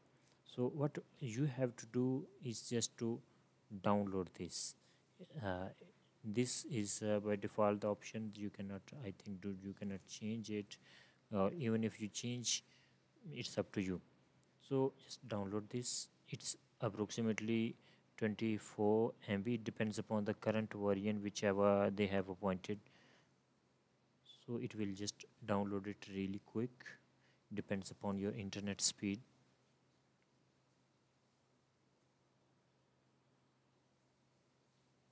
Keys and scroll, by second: 9.9 space, 10.5 BackSpace.